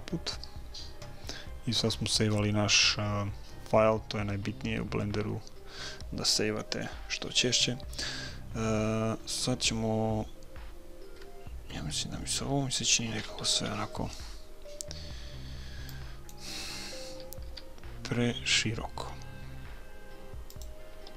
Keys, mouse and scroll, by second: 13.6 b, 17.5 s, 20.9 a.